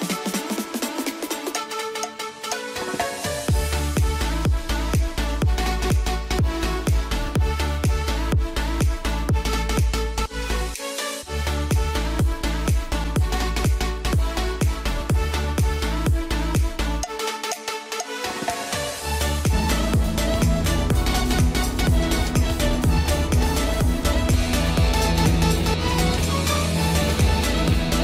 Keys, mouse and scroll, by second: 1.6 F3, 2.2 alt+click, 2.8 g, 3.2 F3, 3.6 click, 4.6-6.6 ctrl+drag, 6.6 shift+c, 9.8 F2, 10.0 click, 12.8 click, 14.0 click, 14.7 F3, 15.7 click, 16.2 shift+F2.